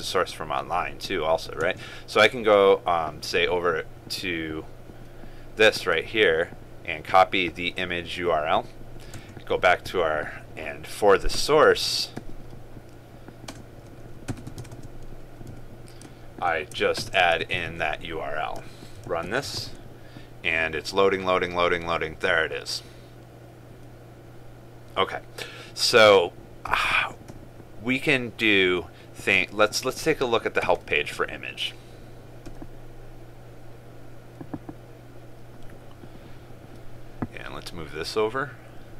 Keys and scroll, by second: 14.8 ctrl+space, 17.8 ctrl+v, 19.2 ctrl+s, 19.8 ctrl+s, 20.0 ctrl+r.